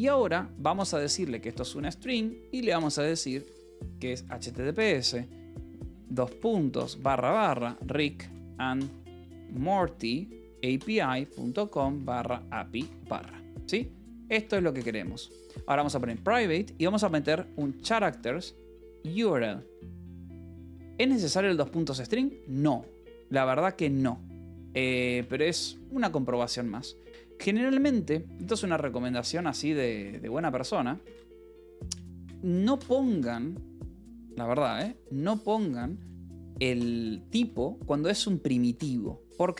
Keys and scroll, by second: 0.7-2.0 typing, 3.5-4.8 typing, 6.6-22.5 typing, 13.4 Escape, 23.7-39.5 typing, 25.5 Escape.